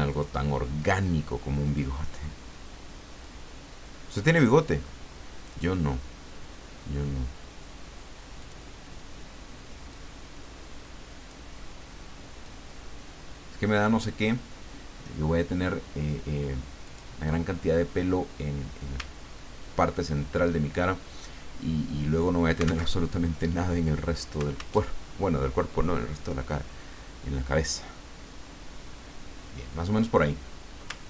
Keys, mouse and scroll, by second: 0.1 click, 3.2-6.2 drag, 8.4 click, 9.9-11.5 drag, 12.4-14.5 drag, 16.8 click, 19.1-19.5 ctrl+scroll down 2, 20.0 ctrl+scroll up 2, 22.9 alt+Tab, 24.8 alt+Tab.